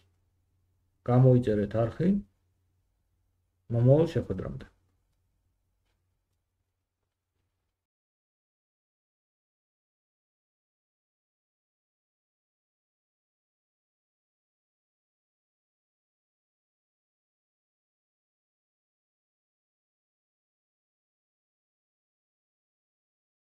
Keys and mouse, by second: 7.2-10.1 drag, 7.2-10.1 right drag, 21.2-22.1 drag, 21.2-22.1 middle drag, 21.2-22.1 right drag, 22.5 middle click, 22.9 middle click.